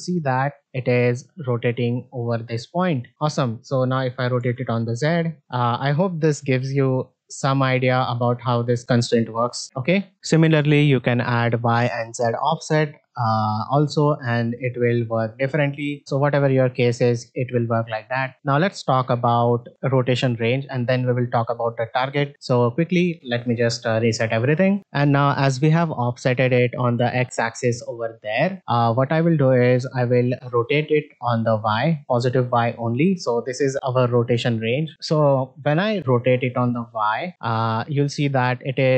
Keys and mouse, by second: 4.3 r, 7.5 r, 18.1 middle click, 19.5 click, 24.0 alt+g, 24.1 alt+r, 29.6-31.5 drag, 37.3 r.